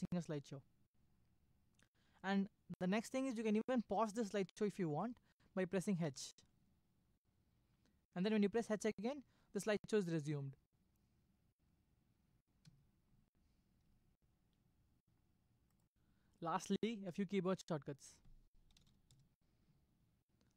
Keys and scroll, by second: 6.1 h, 8.6 h, 12.6 Escape, 18.4-19.3 typing.